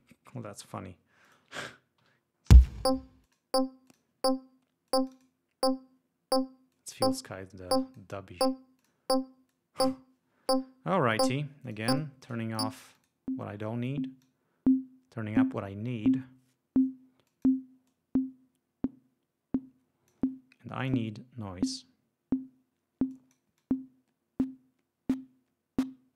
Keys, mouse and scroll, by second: 1.4 click, 2.6 l, 3.4 click, 4.0 click, 5.0 click, 6.8-8.3 drag, 8.9 click, 9.6-10.1 drag, 11.8-12.6 drag, 12.7 click, 13.1 click, 14.3-15.7 drag, 17.4 click, 18.0-20.4 drag, 20.9 click, 23.2 click, 23.7-26.1 drag.